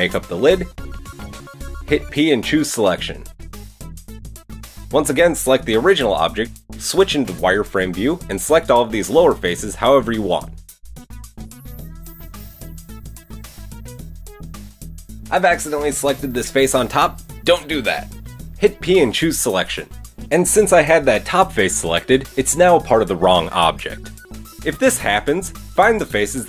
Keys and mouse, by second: 0.4 click, 0.4 KP_7, 0.8 shift+middle click, 1.3 click, 2.6 p, 3.4 Tab, 3.8 click, 5.8 Tab, 6.3 KP_1, 11.1-20.4 middle drag, 13.1 c, 18.9 p, 19.9 Tab, 20.4 click, 20.4-24.5 middle drag, 22.3 Tab, 23.9 Tab, 24.5 click, 25.0 Tab, 25.0 middle click, 25.4 click, 26.1-26.4 shift+middle drag.